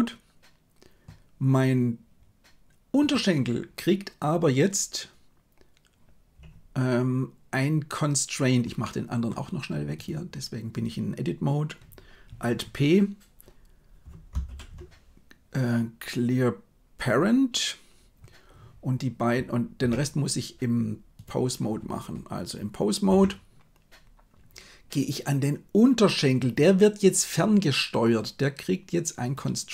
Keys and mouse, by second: 8.7 middle click, 14.4 alt+p, 19.8 Tab, 23.1 KP_1.